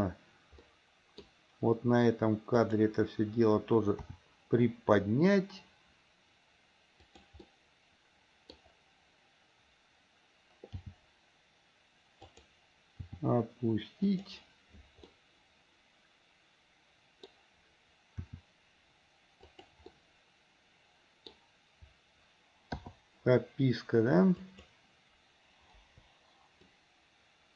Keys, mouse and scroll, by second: 0.8 middle click, 2.8 click, 4.2 r, 7.6-8.8 middle drag, 11.0 g, 13.2 r, 15.2-17.5 middle drag, 18.4 r, 20.1-21.5 middle drag, 24.4 click, 26.0 Delete, 26.9-27.5 drag.